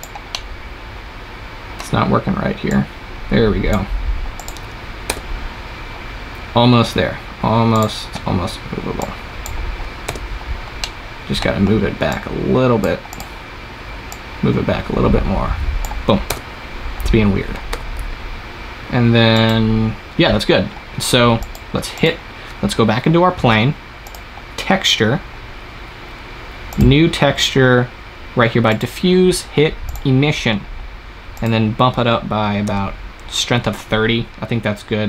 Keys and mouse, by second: 0.9 click, 2.6-5.0 drag, 5.0 KP_0, 7.6-10.0 drag, 10.0 KP_0, 16.2 KP_0, 17.6 s, 21.3 click, 23.9 click, 24.8-26.7 middle drag, 26.7-34.9 drag, 34.9 middle click.